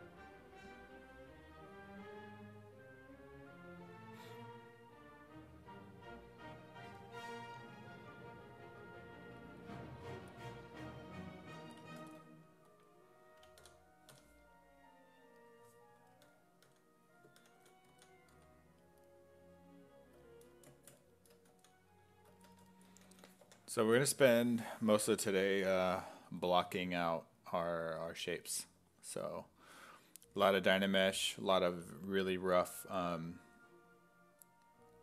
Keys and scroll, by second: 13.6 d, 14.1 d, 16.3 d, 17.4 ctrl+d, 17.9 s, 18.4 x, 21.5 s, 23.1 s, 23.5 5, 24.7 5, 26.3 s, 26.7 5.